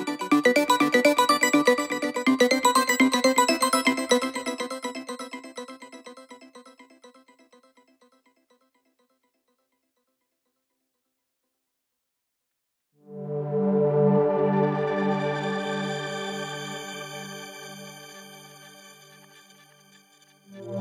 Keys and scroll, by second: 10.7 4.